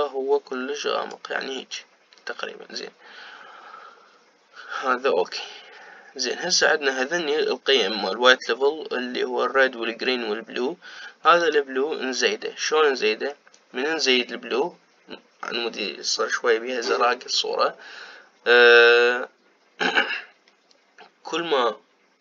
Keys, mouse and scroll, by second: 12.5-22.2 drag.